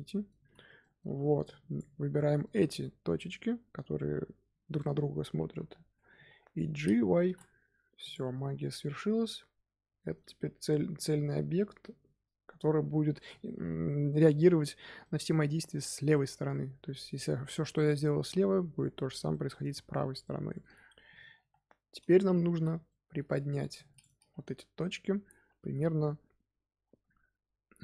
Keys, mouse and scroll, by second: 0.3 z, 0.7 middle click, 1.0 1, 1.4 click, 2.1 middle click, 2.4 z, 2.7-5.4 middle drag, 5.4 KP_1, 7.1 g, 8.2 Tab, 8.4 scroll down 3, 8.7-10.8 middle drag, 10.8-11.4 scroll up 2, 12.1-12.7 scroll up 1, 13.1 Tab, 14.3-18.0 middle drag, 19.2-21.0 shift+middle drag, 21.0 KP_1, 22.4 z, 22.8 shift+middle click, 23.2-23.5 scroll up 1, 23.5 1, 23.7 click, 25.5 g.